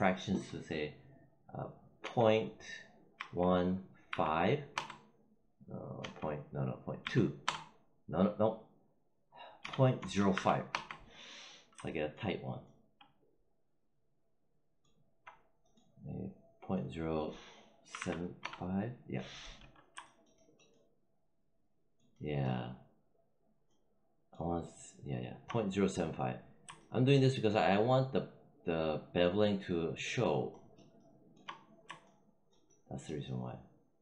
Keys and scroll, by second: 1.9 ., 3.0 1, 4.6 Return, 5.9 ., 6.9 2, 7.3 Return, 9.5 ., 9.8 0, 10.6 Return, 17.8 7, 18.3 Return.